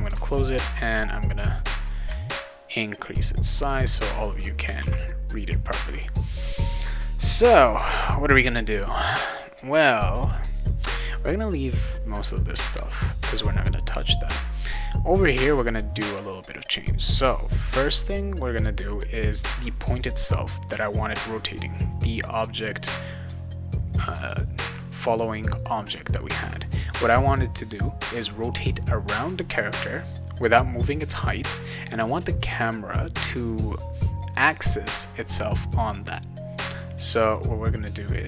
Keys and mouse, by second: 1.8 click, 4.8 ctrl+s, 17.9 click, 22.7 click, 37.3 click.